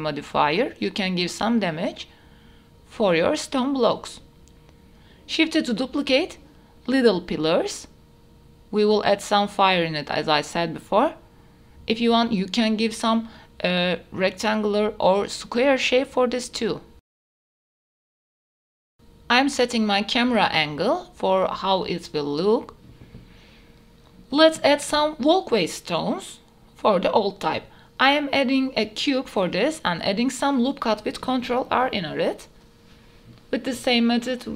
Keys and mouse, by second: 0.2 g, 2.0 h, 2.2-2.6 middle drag, 3.0 click, 3.4-3.9 middle drag, 4.1 KP_7, 4.6 KP_7, 5.1 shift+d, 7.4-8.0 drag, 8.5 g, 8.8 z, 10.2 s, 10.5 z, 11.9 KP_1, 12.6 shift+middle drag, 13.0 g, 14.0 middle drag, 14.5 KP_7, 15.1 shift+middle click, 15.7 shift+d, 16.9-22.8 typing, 18.4 middle click, 25.2 g, 25.4 y, 26.4 s, 26.6 z, 28.4-28.7 middle drag, 29.2 shift+middle click, 29.3 s, 29.4 x, 29.9 middle drag, 30.3 s, 30.8-31.1 middle drag, 31.2 Tab, 32.2 ctrl+r, 34.2 ctrl+r.